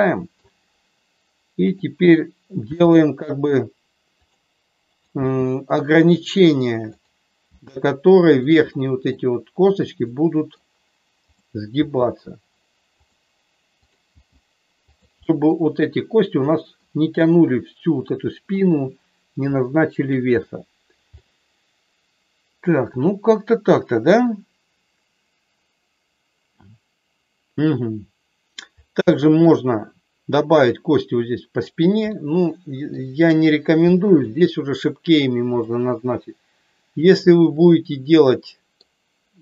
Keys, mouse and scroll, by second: 1.7 click, 2.6 g, 4.2 click, 5.1 g, 6.8 click, 7.5 g, 8.2 click, 8.7 middle click, 10.1 middle click, 11.7 g, 13.8 click, 14.0 g, 14.8 click, 15.2 middle click, 16.4 middle click, 18.4-20.1 middle drag, 21.1-28.6 middle drag, 29.1 shift+middle click, 32.1 middle click, 33.9 middle click, 35.6-38.8 middle drag.